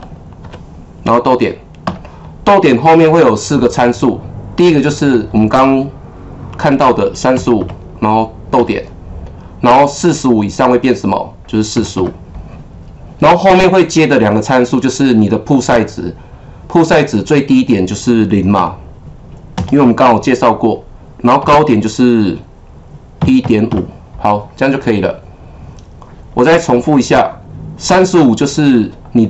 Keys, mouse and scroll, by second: 0.0-0.4 typing, 1.6-2.3 typing, 7.6 KP_5, 8.5 ,, 11.7 KP_4, 12.0 KP_5, 18.5 ,, 19.5 KP_0, 21.4 ,, 23.2 KP_1, 23.4 KP_Decimal, 23.7 KP_5.